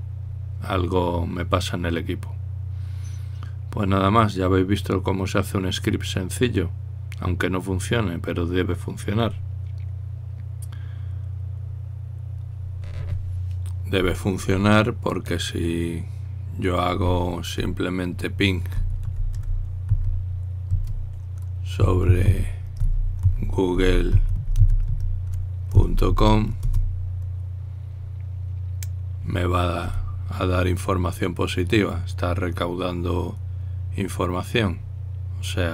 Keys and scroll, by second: 19.4-21.2 typing, 22.6-27.3 typing, 27.4 Return.